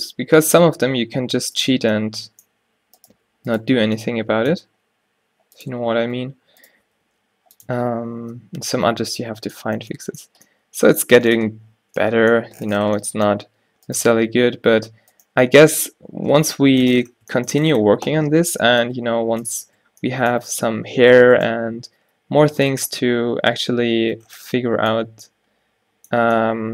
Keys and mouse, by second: 0.6 g, 2.8 z, 3.2 z, 3.9 z, 4.8 g, 5.9 z, 6.3 z, 7.2 g, 7.8 Tab, 13.6 Tab, 14.6 z, 16.5 z, 18.2 z, 18.7 g, 19.6 z, 20.7 z, 22.1 g, 22.8 Tab, 23.1 z, 24.4 a, 25.1 a.